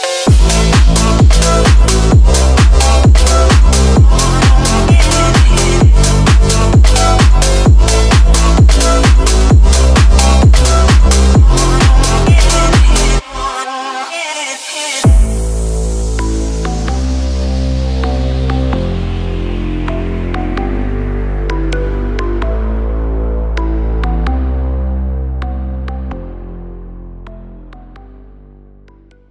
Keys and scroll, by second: 3.5 F3, 3.8 Escape, 3.9 F3, 5.2 Escape, 12.9 ctrl+g, 13.0 ctrl+s, 13.2 Delete, 14.0 Escape, 14.1 z, 14.9 Delete, 15.4 Escape, 15.8 ctrl+z, 18.4 ctrl+g, 20.8 F9.